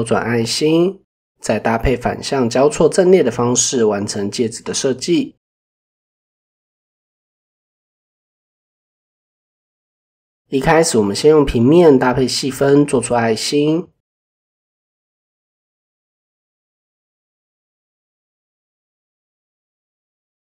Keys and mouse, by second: 1.2 middle drag, 1.6-3.5 middle drag, 5.1-5.6 middle drag, 7.1 click, 8.0 click, 9.4 shift+middle drag, 13.7 click, 15.5 click, 15.8 Tab, 18.5 click, 18.9 click, 19.6 click.